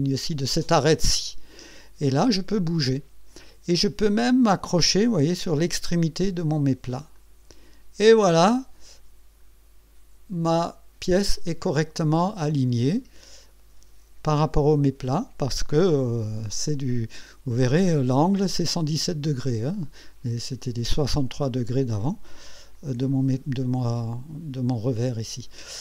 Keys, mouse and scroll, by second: 1.1 click, 7.1 click, 8.2-11.9 drag, 12.1-12.5 scroll down 1, 12.9-13.7 right drag, 22.4 KP_1.